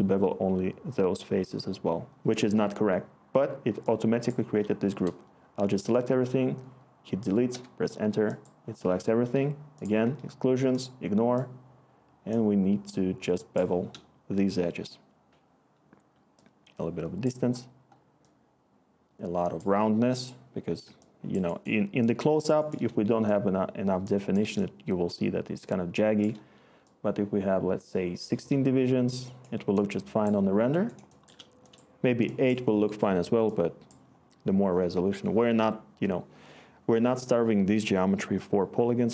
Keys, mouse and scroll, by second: 6.0 Delete, 7.5 Return.